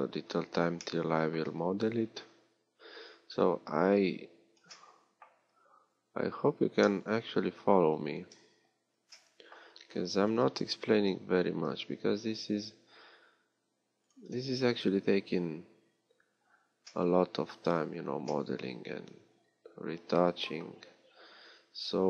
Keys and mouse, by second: 2.8-4.8 middle drag, 5.4 z, 6.1 z, 8.3 KP_3, 10.5 g, 11.5-14.0 drag, 17.6 z.